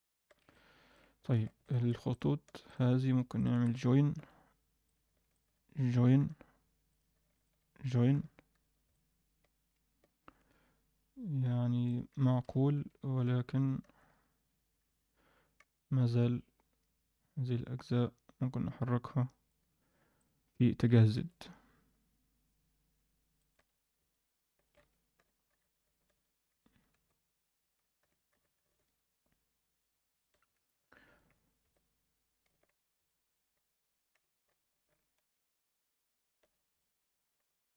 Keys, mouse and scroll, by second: 0.5 middle click, 1.3 alt+a, 1.6 click, 2.0 shift+click, 2.6 click, 3.3 shift+click, 4.2 j, 4.8 click, 5.3 shift+click, 6.2 j, 6.8 click, 7.3 shift+click, 8.1 j, 8.5 scroll down 1, 8.6 Tab, 8.9-11.8 middle drag, 12.4 KP_1, 12.7 Tab, 13.2 z, 13.8 a, 14.0 scroll up 1, 14.8 alt+a, 14.8-15.3 scroll up 3, 15.3 scroll down 2, 15.5 c, 20.1 click, 20.8 g, 23.7 scroll down 1, 24.1 middle click, 24.8 Tab, 25.2 g, 26.9 Tab, 28.0 g, 30.4 scroll down 2, 30.5 Tab, 30.8-31.1 alt+middle drag, 31.3-32.4 scroll up 2, 31.6-32.4 middle drag, 32.7 scroll up 1, 33.0 alt+middle drag, 34.1 g, 36.7 alt+middle click, 37.4 Tab.